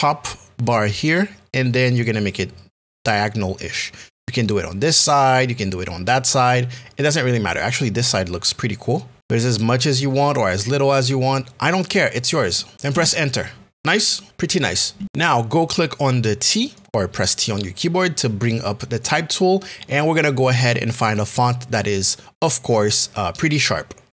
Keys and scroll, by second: 12.9 Return.